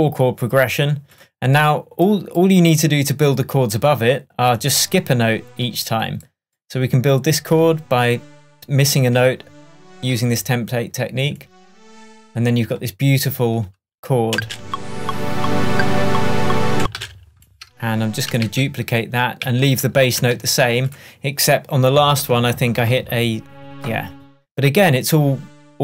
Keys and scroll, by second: 14.4 space, 16.8 space, 18.5 super+d.